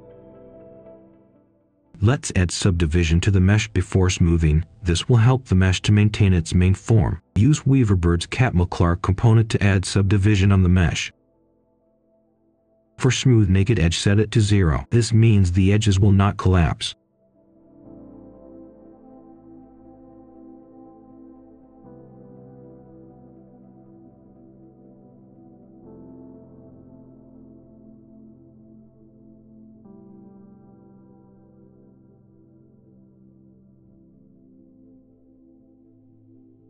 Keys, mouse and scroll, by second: 0.6 ctrl+right click, 1.5 click, 2.4 shift+click, 3.4 click, 3.5 Escape, 3.6 click, 4.3-7.7 typing, 8.1 Return, 9.4 click, 11.0 ctrl+right click, 13.5 click, 14.7 0, 14.9 Return, 15.6-16.8 drag, 18.4 0, 19.3 3, 19.4 Return, 20.1-20.5 scroll down 1, 20.5 click, 21.7 middle click, 22.2 click, 23.2 ctrl+right click, 23.9 click, 25.3 ctrl+right click, 26.2-31.0 drag, 31.3 ctrl+right click, 32.4-35.3 drag, 35.3 middle click, 35.8-36.6 drag.